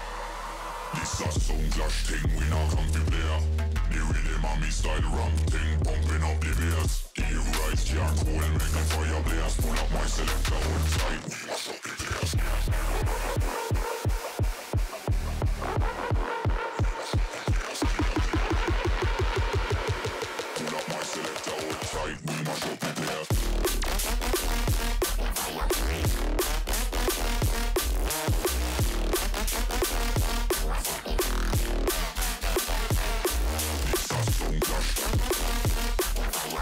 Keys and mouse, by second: 5.7 g, 7.0 g, 9.2 click, 10.1 alt+h, 12.7 middle click, 13.2 click, 13.5 middle click, 13.8-18.0 typing, 19.1 z, 19.2 z, 19.6 z, 20.2 shift+a, 22.6 click, 23.2-29.0 drag, 30.9 click, 33.4-34.6 drag, 35.6 click.